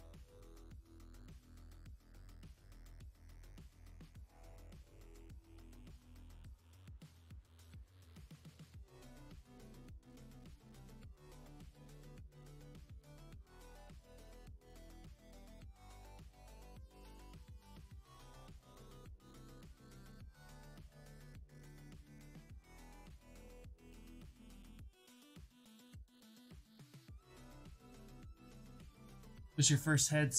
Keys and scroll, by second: 18.3 ctrl+z, 27.4 w.